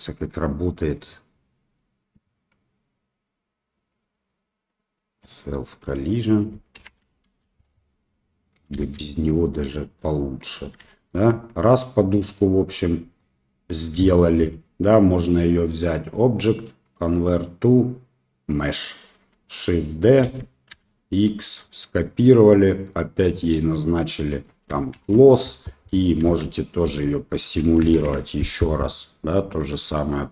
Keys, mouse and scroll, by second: 0.2 click, 5.2 click, 6.8 shift+Left, 7.3 space, 9.2 drag, 9.2 space, 9.9-10.7 middle drag, 10.9 shift+middle click, 11.6 middle click, 13.2 middle click, 16.0-17.2 drag, 20.2 shift+d, 22.0 drag, 22.2 middle click, 24.9 shift+Left, 26.2 space, 26.8 space, 27.9 shift+Left.